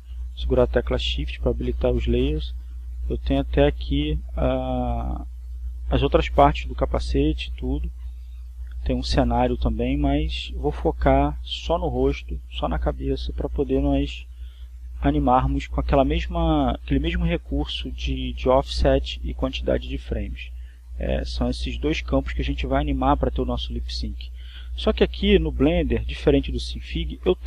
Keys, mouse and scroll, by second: 3.0 shift+click, 4.5 right click, 5.1 middle click, 10.1 shift+click, 12.0 right click, 14.6-16.6 drag.